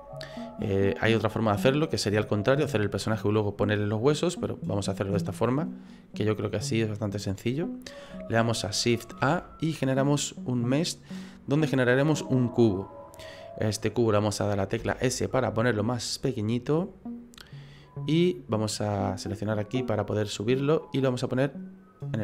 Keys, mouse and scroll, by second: 5.7 right click, 9.2 shift+a, 14.8 s, 17.7 middle click, 19.3 click, 20.6 click.